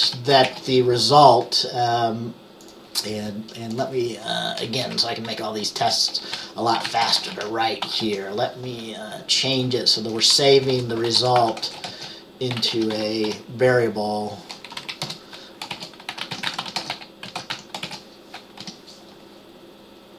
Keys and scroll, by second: 0.0-1.1 typing, 5.9 Return, 6.2-8.6 typing, 10.4 Up, 10.8 Return, 11.0-13.9 typing, 14.9 Down, 15.2 Return, 15.6-18.7 typing.